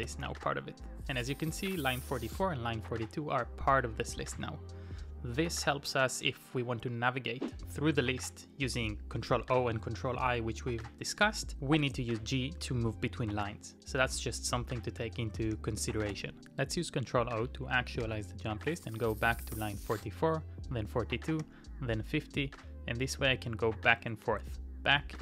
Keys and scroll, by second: 0.0-0.9 typing, 15.3 Return, 16.1 ctrl+o, 18.0 ctrl+o, 19.5 ctrl+o.